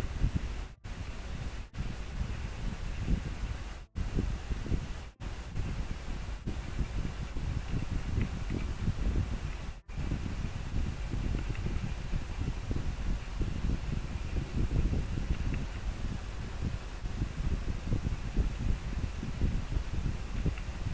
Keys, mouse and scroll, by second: 8.3 scroll down 1, 10.5 scroll up 1, 16.2 scroll down 1.